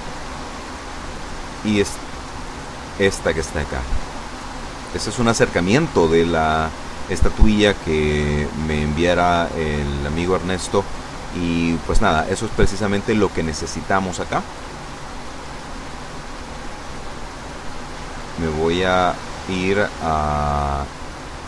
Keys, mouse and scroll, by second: 0.1-1.0 scroll down 2, 1.6 click, 2.5 click, 4.0 scroll down 1, 16.0 Tab, 16.8 Tab, 17.7 Tab, 18.7 z.